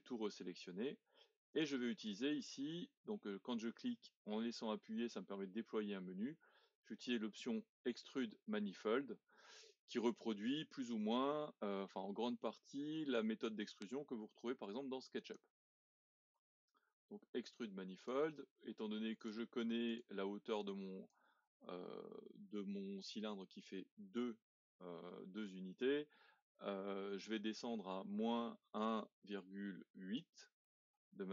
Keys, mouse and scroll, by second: 1.5-5.2 drag, 16.7 click, 19.2-22.3 drag.